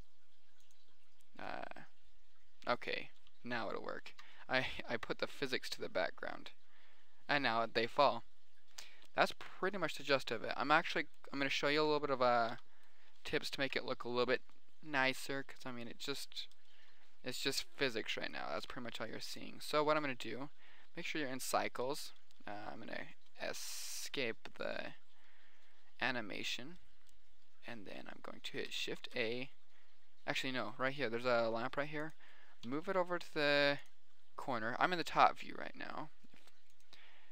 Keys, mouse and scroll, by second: 0.0 middle drag, 0.6 middle click, 1.1 click, 4.5 alt+a, 11.7-12.0 middle drag, 12.6 middle click, 13.0 z, 14.1 KP_7, 15.0 middle click, 15.3 middle click, 18.0 middle click, 18.6 right click, 19.1 g, 19.2 middle click, 19.8 click, 20.3 shift+a, 24.1 Escape, 24.6 middle click, 29.5 shift+a, 31.8 g, 33.2 g, 34.2-36.0 middle drag, 36.6-37.1 middle drag, 37.2 middle drag.